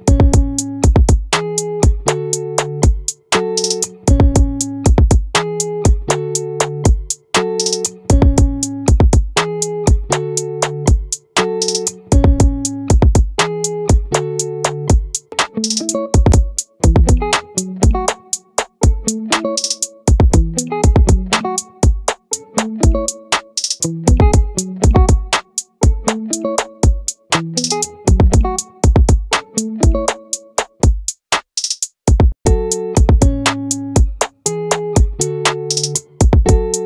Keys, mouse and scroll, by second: 11.8 s, 17.1-20.4 drag, 23.8-25.7 drag, 28.7 middle click, 29.9 middle click, 34.6 middle click, 35.3-36.8 drag.